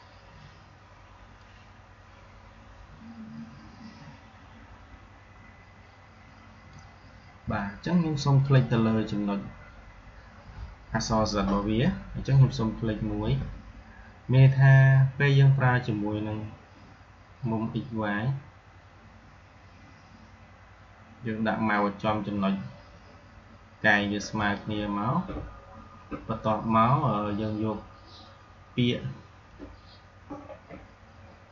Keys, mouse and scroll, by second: 13.1 r, 24.1 alt+Num_Lock, 24.5 alt+click.